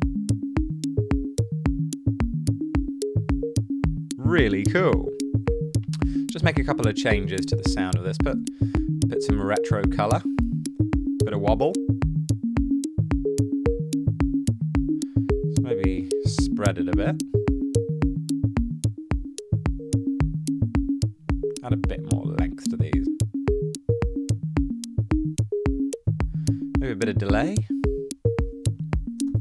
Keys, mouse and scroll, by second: 7.1-8.0 typing, 8.1 Down, 8.3 Return, 28.2-29.4 typing.